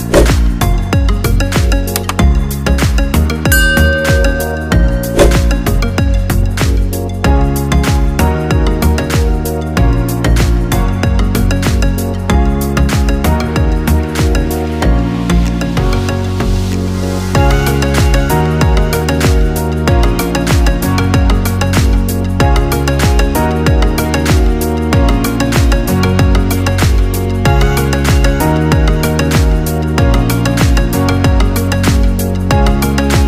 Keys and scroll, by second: 21.4 F7.